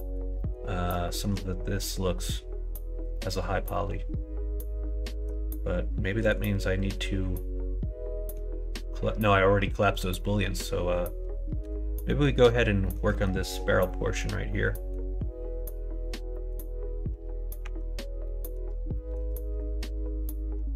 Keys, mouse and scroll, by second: 0.3 middle click, 1.0 shift+middle click, 3.1-5.2 middle drag, 6.2 click, 6.9-8.3 middle drag, 10.2 middle click, 12.1 middle click, 12.8 middle click, 13.1 middle click, 13.8 middle click, 14.5 middle click, 16.3 middle click, 17.6 Tab, 18.2 middle click, 18.9 shift+middle click.